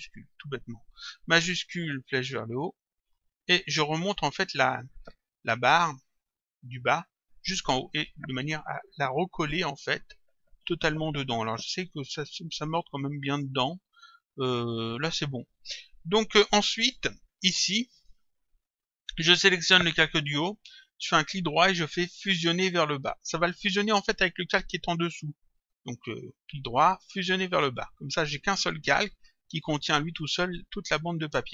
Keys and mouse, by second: 8.1 Up, 10.0 Up, 17.3 click, 19.4 click, 21.1 right click, 24.0 click, 25.6 right click, 27.5 click, 29.7 click.